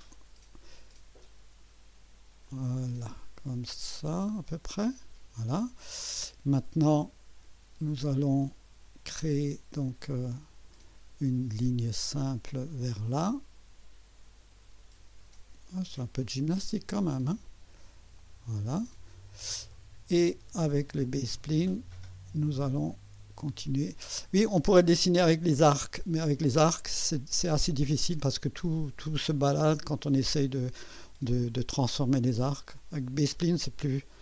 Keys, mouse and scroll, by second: 1.2 right click, 2.5-5.4 drag, 12.6 click, 15.9 click, 18.2 click, 21.2 click, 23.5 click.